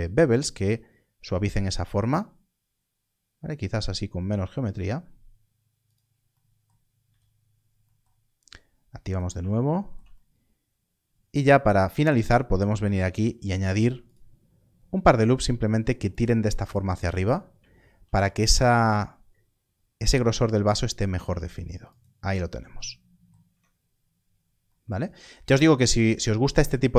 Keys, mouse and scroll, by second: 2.4 ctrl+b, 2.5-4.4 scroll down 1, 5.8 click, 7.0 z, 9.0 click, 12.0 ctrl+r, 16.1 click, 17.1 scroll up 1, 17.9 ctrl+r, 18.5 click, 21.8 click, 23.4 Tab, 23.7-24.0 scroll down 1, 25.4 alt+a.